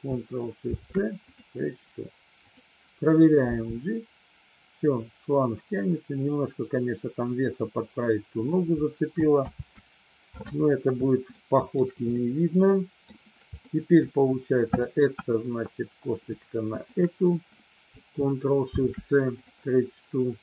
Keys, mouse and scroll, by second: 0.6 ctrl+shift+c, 2.5-3.6 drag, 3.6 g, 8.3 click, 9.3 ctrl+z, 11.3 shift+middle click, 12.2 middle click, 13.6 middle click, 14.6-15.9 drag, 16.9-17.9 shift+drag, 18.7 ctrl+shift+c.